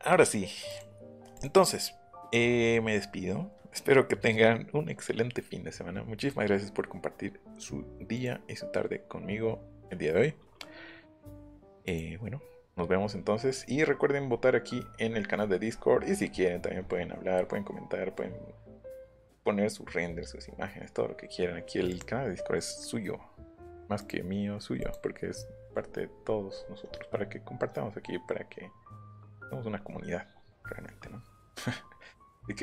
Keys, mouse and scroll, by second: 0.7 click, 1.3 click, 2.7 scroll up 2, 3.0 scroll down 2, 8.1 click, 11.8 click, 13.6-15.1 scroll down 5, 15.1 scroll up 1, 15.3 scroll down 1, 15.4 scroll up 1, 15.7 scroll down 1, 15.7-16.5 scroll up 4, 16.5 scroll down 2, 16.8 scroll up 2, 17.3 scroll down 2, 18.0-18.6 scroll up 4, 20.0 scroll up 2, 21.9 click, 24.0 click, 24.8 click, 25.9 scroll down 1.